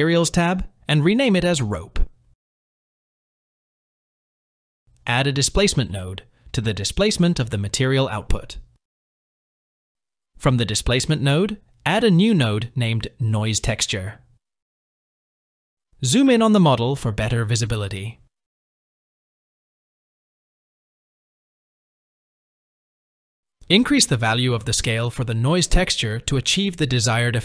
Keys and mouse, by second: 0.2-3.3 drag, 5.8-10.1 drag, 11.5-12.6 drag, 14.8 click, 18.5-19.1 shift+middle drag, 21.9 click, 23.3-27.4 drag.